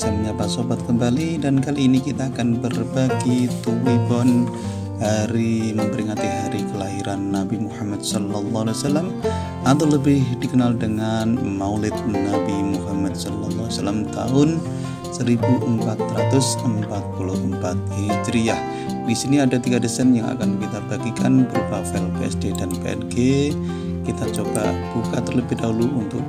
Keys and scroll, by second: 14.4 r.